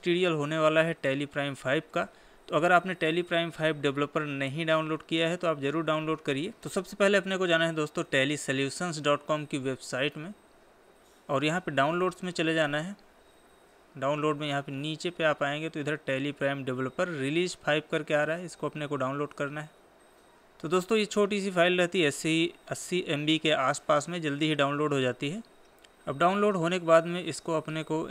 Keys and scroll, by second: 8.1 Right.